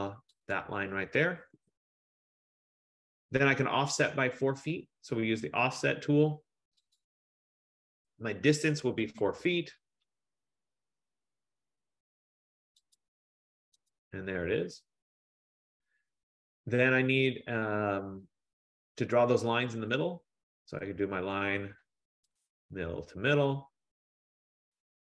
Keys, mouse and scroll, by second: 0.7 click, 1.6 Return, 2.5 scroll, 3.3-5.7 scroll, 7.1 click, 9.1 typing, 9.5 Return, 13.1 click, 14.0 click, 20.1 click, 22.5 click, 24.9 click.